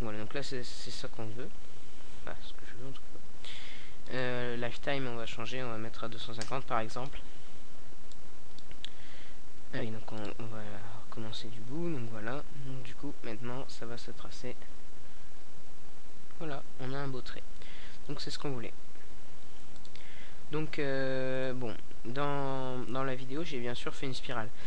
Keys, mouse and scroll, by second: 1.2-3.2 middle drag, 5.2-5.8 middle drag, 6.0 alt+a, 9.1 middle click, 14.7 a, 16.6 click, 19.9 middle click.